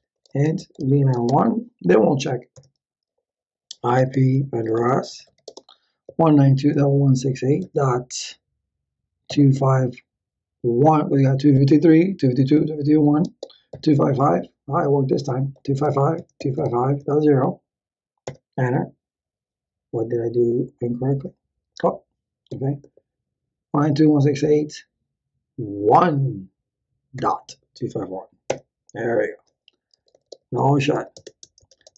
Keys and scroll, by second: 0.0-2.0 typing, 2.5 Return, 3.5-10.8 typing, 13.2-17.7 typing, 18.2 Return, 22.5 Up, 22.8 Left, 23.5 Left, 25.9 1, 27.2 ., 28.5 Return, 29.7-31.4 typing.